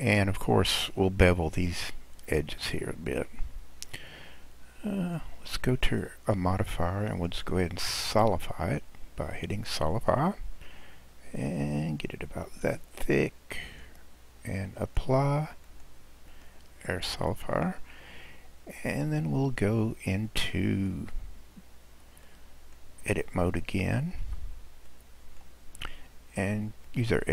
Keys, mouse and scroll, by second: 2.6-5.6 middle drag, 5.9-7.1 middle drag, 7.1 click, 8.1-11.2 drag, 11.4-14.3 drag, 14.8-16.5 drag, 16.9-19.9 middle drag, 21.3-21.6 scroll down 1, 21.7-22.2 scroll up 2, 22.2-23.5 middle drag, 23.5 click, 24.2 Tab, 24.9-26.9 middle drag, 26.9 click.